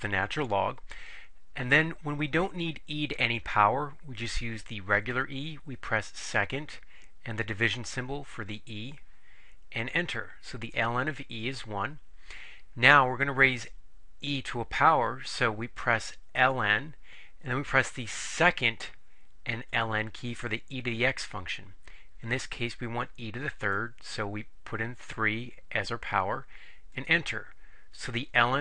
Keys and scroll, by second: 9.9 Return, 23.8 3, 27.0 Return.